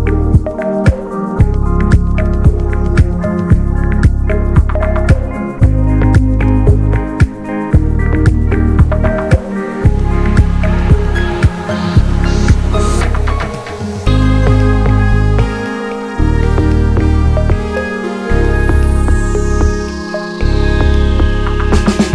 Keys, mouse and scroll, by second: 1.5-1.8 middle drag, 1.5-1.8 scroll up 1, 3.2 click, 5.4 middle click, 6.1-6.8 scroll up 4, 6.8-9.3 drag, 9.3-9.9 middle drag, 9.9-11.1 scroll up 4, 11.1-14.6 drag, 14.6-18.3 middle drag, 18.3 scroll up 4, 18.5-19.8 drag, 19.8-20.5 scroll down 1, 20.5-21.2 scroll up 3, 21.2-22.1 scroll up 1.